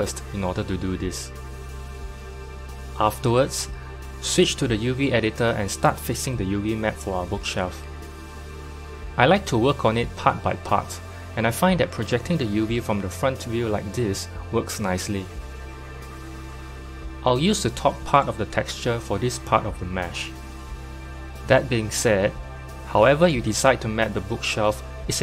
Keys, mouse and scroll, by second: 1.4 /, 2.3 middle click, 3.1 /, 3.8-4.8 middle drag, 4.8 KP_7, 6.8-8.0 scroll down 1, 8.0 z, 12.4 click, 14.6 u, 17.7-19.2 drag, 19.4-20.1 scroll down 2, 20.1 s, 22.1 g, 24.6 s.